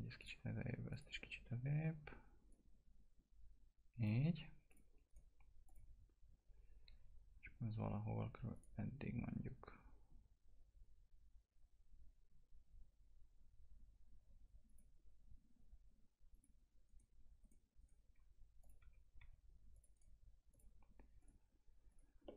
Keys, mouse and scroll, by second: 5.0 right click, 5.6 click, 8.5 click, 14.6 click, 16.8 right click, 18.6 click, 18.8 typing, 19.7 click, 19.9 right click, 20.5 click, 22.2 middle click.